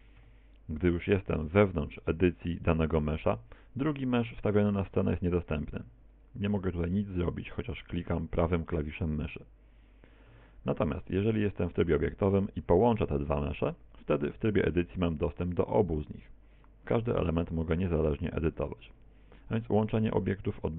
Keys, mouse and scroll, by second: 0.2 Tab, 1.6 right click, 2.0 middle click, 3.1 right click, 4.4 right click, 4.7 right click, 5.1 right click, 5.5 right click, 5.8 right click, 6.2 right click, 7.1 right click, 7.5 right click, 7.9 right click, 8.5 right click, 8.8 right click, 8.9 right click, 9.3 right click, 10.3 a, 11.1 Tab, 12.1 shift+right click, 13.1 ctrl+j, 14.4 Tab, 15.1 right click, 15.5 right click, 15.9 right click, 16.3 right click, 16.6 right click, 16.9 right click, 17.3 right click, 17.9 right click, 18.2 right click, 18.6 right click, 18.9 right click, 19.5 right click, 19.9 right click, 20.3 right click, 20.6 right click.